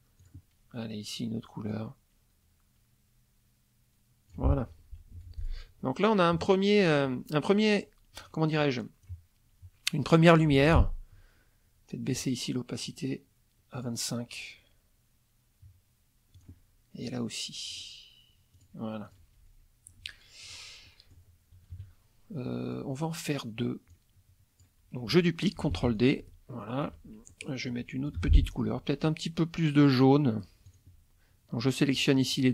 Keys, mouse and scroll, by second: 0.2 click, 1.7-4.5 drag, 5.1 F1, 5.4 click, 6.3 KP_Subtract, 8.2 click, 8.6-9.2 drag, 10.2 middle click, 10.6 F2, 12.8 right click, 13.7 click, 16.3 click, 17.7 right click, 18.5 click, 19.0 click, 20.0 F1, 20.4 click, 20.8 middle click, 21.7 KP_Subtract, 22.4 middle click, 23.9-24.8 drag, 25.7 ctrl+d, 25.9-27.0 ctrl+drag, 27.3 ctrl+click, 27.7 ctrl+click, 28.2 F2, 28.7 click, 30.6 click, 31.6 shift+click.